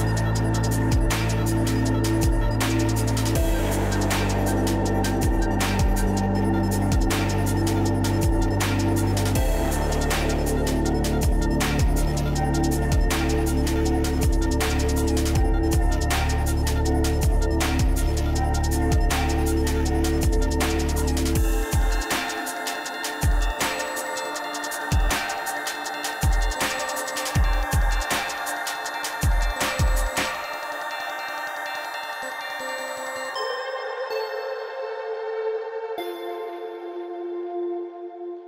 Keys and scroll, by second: 16.9 BackSpace.